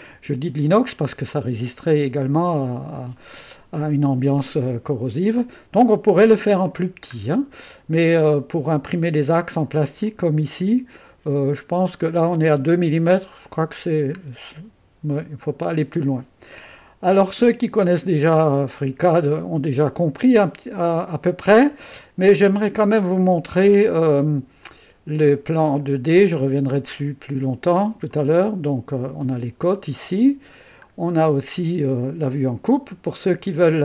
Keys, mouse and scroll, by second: 1.3 click, 3.3-5.9 middle drag, 5.9 click, 6.8-9.7 scroll down 1, 10.0 click, 10.2-11.9 middle drag, 13.9-14.5 scroll down 1, 14.5-15.6 middle drag, 15.8 middle click, 16.0 click, 16.9 middle click, 19.1 click, 21.0 click, 21.8-24.6 drag, 24.8-27.8 drag, 28.2 click, 28.4 click, 30.9 middle click.